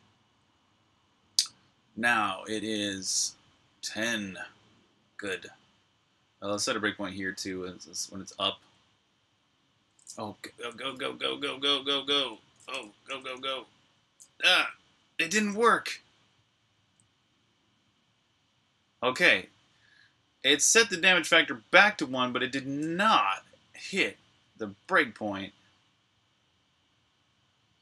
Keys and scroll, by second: 10.2-11.8 typing, 13.3-15.3 typing, 16.5 f.